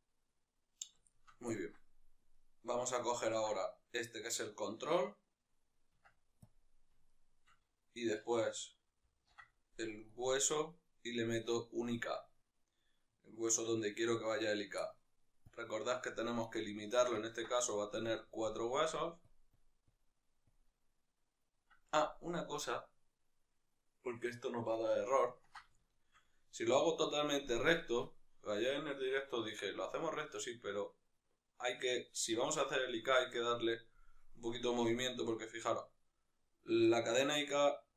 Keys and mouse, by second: 2.1-2.8 right drag, 2.8-6.8 ctrl+middle drag, 6.3 Tab, 6.8-10.0 shift+right drag, 10.0 ctrl+shift+c, 13.9-16.6 right drag, 16.6-19.1 shift+middle drag, 19.1-25.0 drag, 25.0-33.3 ctrl+middle drag, 33.3 right click, 34.6 g.